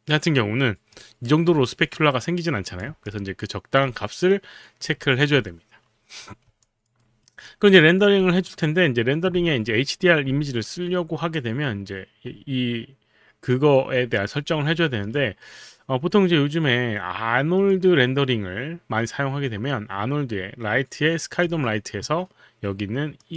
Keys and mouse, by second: 1.0 click, 3.1 alt+click, 6.7 alt+click, 7.0 alt+right click, 15.1 click, 17.6 click, 21.2 click, 23.2 click.